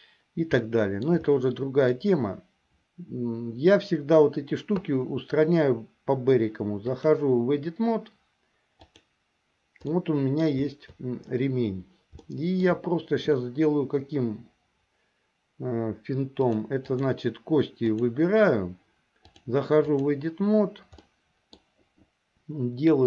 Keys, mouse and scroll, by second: 0.9 shift+middle click, 1.5 middle click, 7.0-9.3 drag, 10.1 middle click, 12.3 shift+middle click, 16.4 click, 18.0 click, 19.3-20.3 drag, 21.1 middle click.